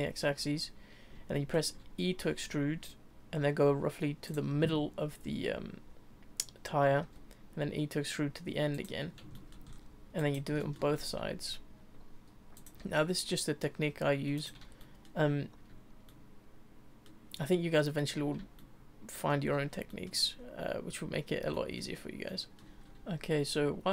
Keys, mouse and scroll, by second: 2.2 e, 7.0 e, 9.1 scroll down 3, 9.3 shift+middle click, 9.7-10.2 scroll up 3, 10.2 click, 10.6 shift+middle click, 11.0 e, 12.8 e, 14.8 shift+middle click, 16.1 shift+middle click, 17.4 shift+middle click, 18.6 shift+middle click, 19.9 shift+middle click, 20.3-21.5 scroll up 2, 21.5-22.6 shift+middle drag, 22.9 shift+middle click, 22.9 scroll down 1, 23.4 middle click.